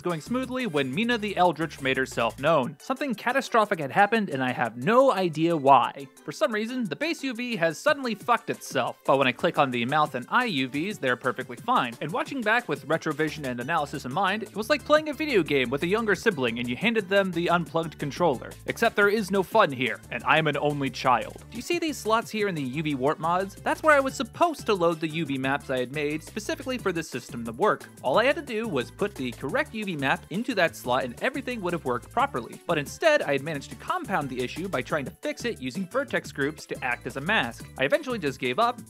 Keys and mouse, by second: 1.2 click, 2.9 click, 4.1 middle click, 5.8 click, 6.1 click, 7.0 middle drag, 9.6 click, 11.0 click, 14.6 click, 16.2 click, 17.0 click, 17.6 shift+space, 21.4 click, 32.9-33.9 drag, 36.7 click, 37.6 g, 37.6 y, 38.1 g.